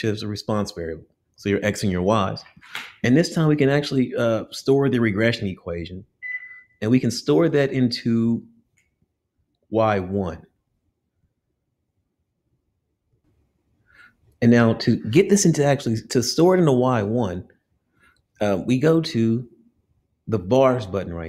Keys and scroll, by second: 2.8 Down, 3.1 Down, 4.0 Down, 13.2 Down, 13.2 Up.